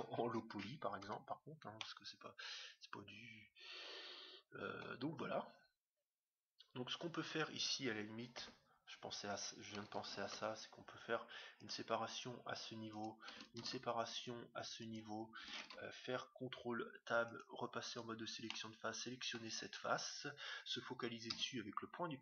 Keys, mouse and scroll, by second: 1.1 Tab, 1.1-1.7 scroll down 1, 1.7-3.5 middle drag, 6.5-7.0 scroll up 1, 7.0-9.2 middle drag, 8.3 Tab, 8.9 scroll up 1, 10.2 ctrl+r, 13.5 ctrl+r, 15.6 ctrl+Tab, 18.0-19.5 right drag, 18.5 click, 19.2-20.2 middle drag.